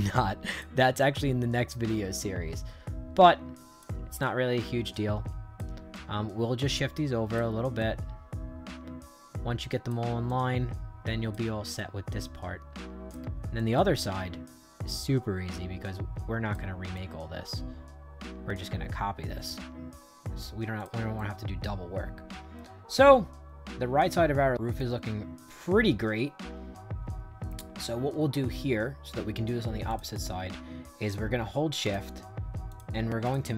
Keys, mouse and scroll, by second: 0.9-2.0 drag, 2.5-3.7 drag, 4.1-5.5 drag, 5.8-7.3 drag, 7.7-9.8 drag, 10.2-11.2 drag, 11.7-13.0 drag, 13.5-16.4 drag, 16.9-20.3 drag, 20.7 click, 21.1-24.7 right drag, 29.8 click, 31.7 shift+click, 32.6 shift+click, 33.2 shift+click.